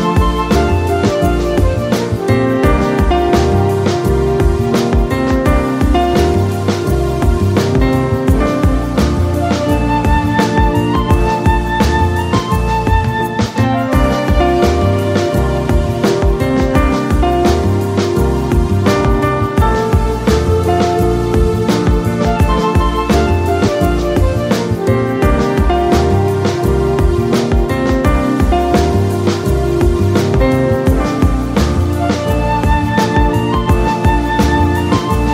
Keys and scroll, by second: 20.7 space, 29.0 Delete, 30.2 ctrl+j, 31.4 Delete, 33.2 Return.